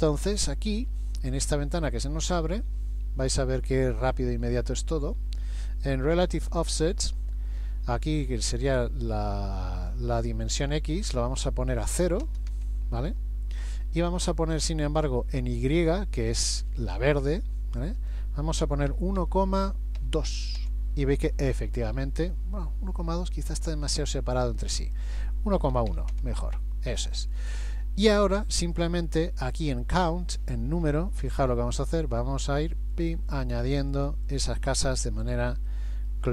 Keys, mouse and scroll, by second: 4.1 scroll down 1, 10.9 click, 18.0 click, 23.2 middle click, 24.8 click, 30.8 scroll down 1, 33.0 click, 33.0-33.3 scroll down 1, 33.3 click, 33.7 click, 34.0 click, 34.3 click, 35.0-35.7 scroll down 2, 35.7 middle click.